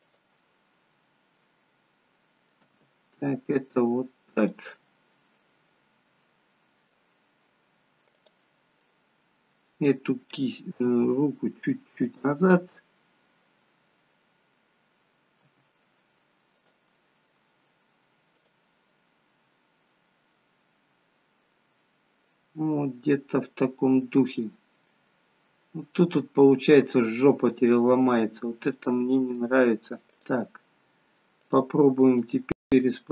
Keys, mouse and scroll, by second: 0.5 middle click, 2.8 g, 4.9 middle click, 6.1 middle click, 8.2 click, 8.8 middle click, 10.9 g, 15.6 g, 17.0 middle click, 18.5 click, 19.1 middle click, 25.2 middle click, 27.9 middle click, 30.3 click, 31.4 click, 32.2 click.